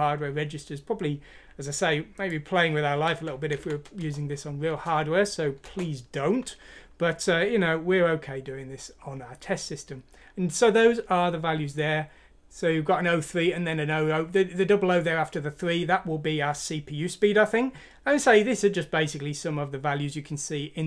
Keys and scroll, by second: 4.0 Return, 5.7 Return.